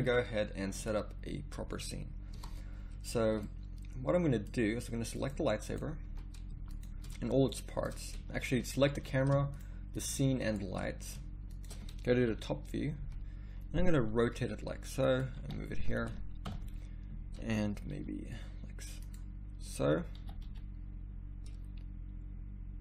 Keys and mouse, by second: 2.3 Escape, 6.0 z, 8.1 z, 9.0 z, 12.3 KP_7, 13.0 z, 14.1 r, 15.4 g, 16.5 KP_0, 17.9 g, 20.2 g.